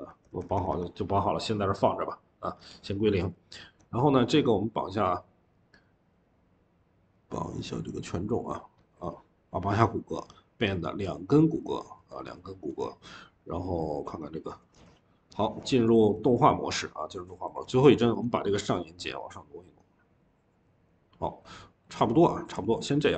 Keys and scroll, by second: 0.1 Return, 0.3 Return, 17.8 Escape, 18.0 Escape, 22.4 ctrl+z.